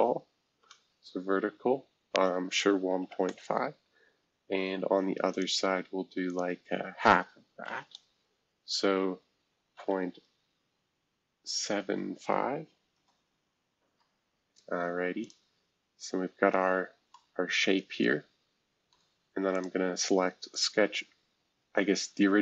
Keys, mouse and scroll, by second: 2.4-3.6 typing, 5.3-9.4 drag, 9.7 ., 11.6-12.0 typing, 12.9 Return, 15.2 click, 16.7 scroll up 2, 17.1-19.5 middle drag, 19.5 click, 20.5 ctrl+click.